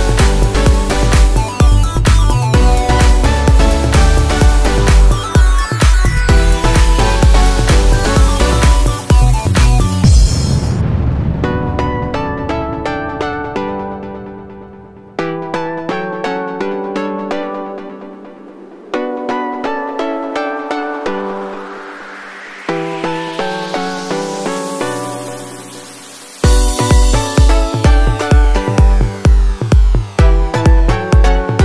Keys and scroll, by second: 21.4 ctrl+t.